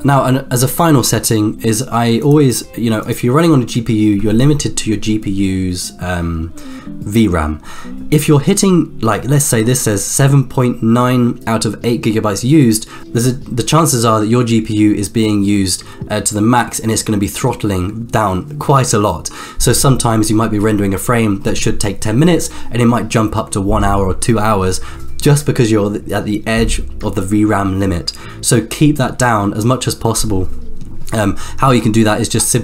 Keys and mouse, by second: 3.9 click, 4.3-5.0 drag.